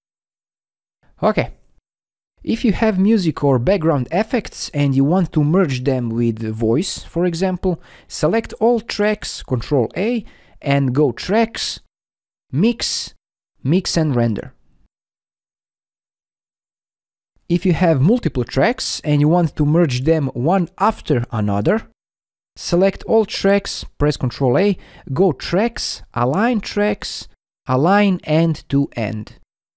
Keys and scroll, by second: 9.1 ctrl+a, 23.5 ctrl+a.